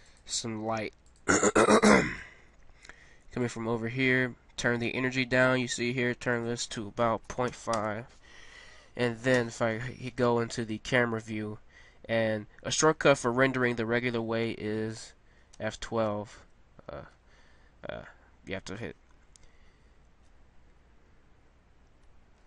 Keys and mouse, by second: 0.5 g, 1.5 r, 2.7 g, 6.3-8.3 drag, 9.3 KP_0, 10.4 click, 21.2-22.1 KP_Enter.